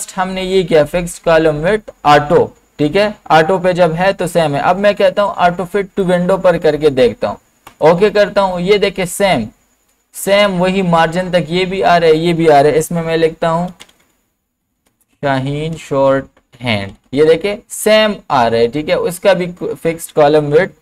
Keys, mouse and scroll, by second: 6.0 click, 6.0 click, 13.4-17.4 typing, 19.1 typing, 20.5 typing.